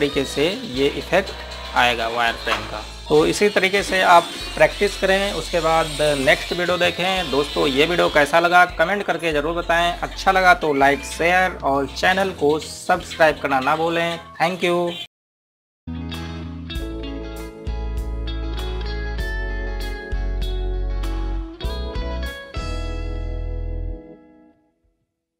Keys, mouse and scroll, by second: 1.1 scroll up 1, 3.0-3.5 scroll down 1.